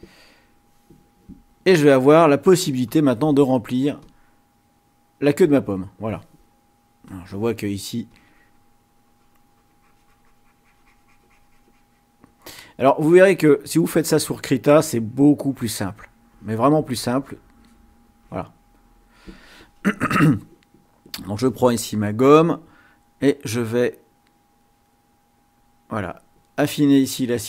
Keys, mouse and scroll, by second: 2.9 click, 4.0 click, 7.1 click, 7.9-9.4 drag, 11.8-13.6 drag, 14.1 click, 14.9-16.7 drag, 17.4 click, 18.2 click, 21.2 click, 23.4-25.8 drag.